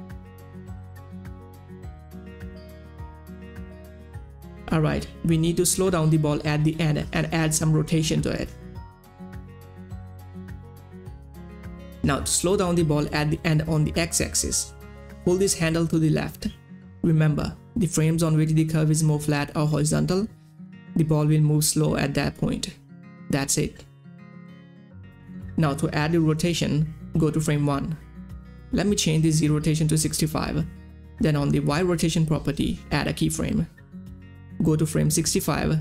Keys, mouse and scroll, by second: 10.3 middle click, 10.3 click, 12.1 F9, 14.2-21.3 drag, 21.9-25.8 drag, 25.8-27.0 drag, 30.2-31.1 typing, 33.4 click, 34.6 u, 35.7-35.8 drag.